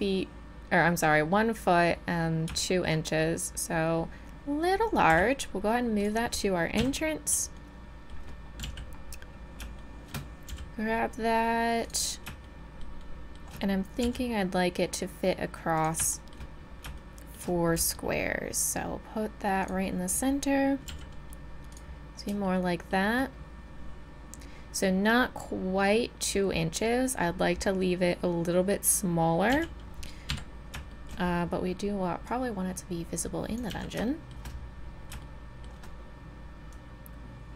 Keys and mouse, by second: 5.1 g, 6.8 KP_7, 8.3-8.6 middle drag, 8.6 z, 9.8 middle drag, 10.0 middle click, 10.2 middle click, 10.5 g, 14.0 s, 16.7 middle click, 17.3-19.6 middle drag, 17.8 g, 20.9 s, 22.4-24.4 middle drag, 29.5 z, 30.3 KP_3, 32.3-34.1 drag, 33.7 z, 34.1 middle click, 36.7-37.5 drag.